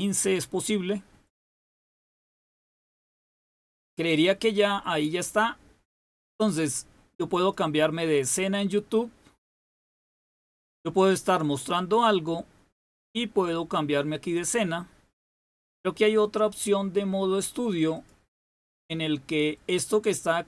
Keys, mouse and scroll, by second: 7.4 click, 14.0 click, 17.8 click.